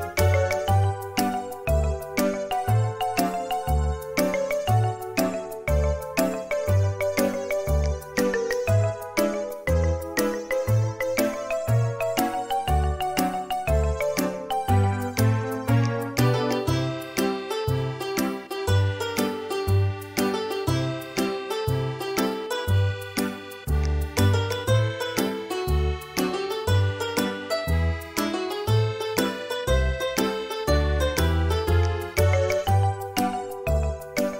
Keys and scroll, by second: 3.7 space, 28.1 Escape, 28.6 Escape.